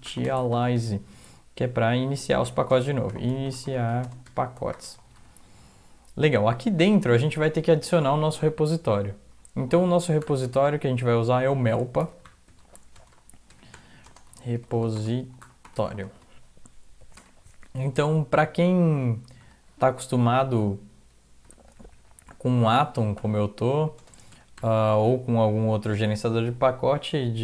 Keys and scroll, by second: 0.0-5.7 typing, 1.6 End, 5.9 Up, 6.9 Return, 10.2 typing, 11.8-16.5 typing, 17.2 Return, 19.4 Return, 19.9 Up, 20.4 Up, 21.5 Delete, 21.6 Delete, 21.8 Delete, 21.9 Delete, 24.0 ', 24.6 ;, 25.3 Down, 25.6 Down, 27.2-27.4 typing.